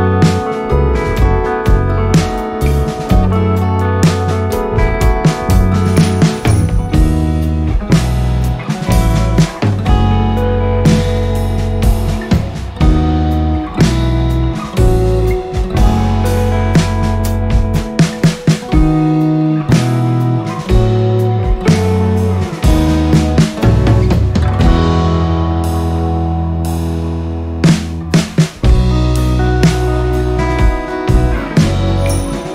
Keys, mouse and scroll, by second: 1.2 ctrl+scroll up 1, 2.9-6.7 drag, 6.7-8.6 drag, 8.6-11.7 drag, 11.7 ctrl+scroll up 1, 12.6-25.3 drag, 25.3 ctrl+scroll down 1, 26.8 ctrl+scroll up 1, 27.4 click.